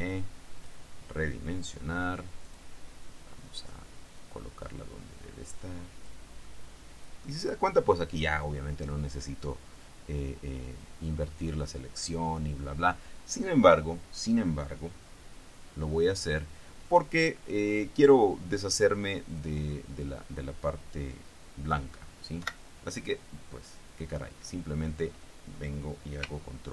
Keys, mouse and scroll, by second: 0.7 click, 2.6 click, 7.1 middle click, 17.1 click, 19.5 click, 22.5 Delete.